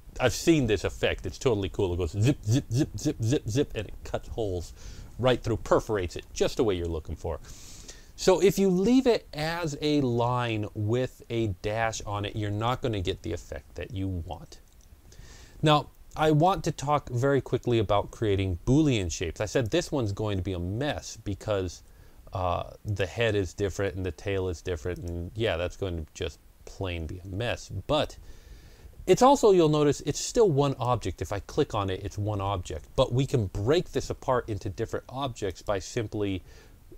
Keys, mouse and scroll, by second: 7.9 click, 7.9 scroll down 1, 8.6 click, 13.8 click, 13.8-14.2 scroll down 2, 16.8-17.2 ctrl+scroll up 1, 19.4 click, 19.4 click, 24.8 shift+click, 29.2-35.3 shift+drag, 35.3-36.9 drag.